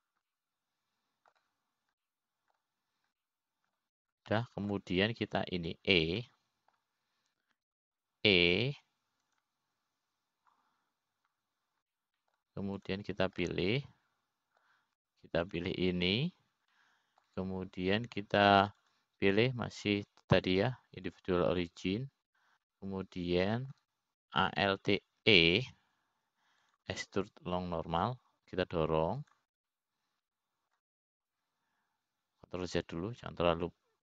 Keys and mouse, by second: 1.6-2.6 drag, 2.9-4.0 middle drag, 4.6 middle click, 5.8 middle click, 6.9 middle click, 7.8 click, 8.8 middle click, 10.3 e, 14.5 middle click, 15.4 click, 16.1-17.3 middle drag, 18.0 shift+click, 19.3 middle click, 21.4-22.6 drag, 22.9-23.9 drag, 25.2-26.3 middle drag, 27.6 alt+e, 32.2-33.4 middle drag.